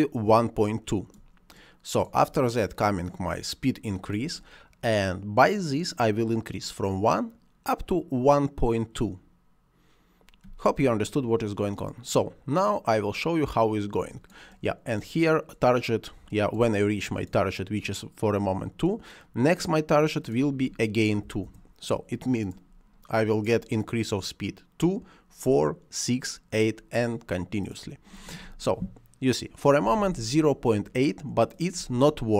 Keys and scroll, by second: 21.1 2, 21.3 Return, 31.6 space.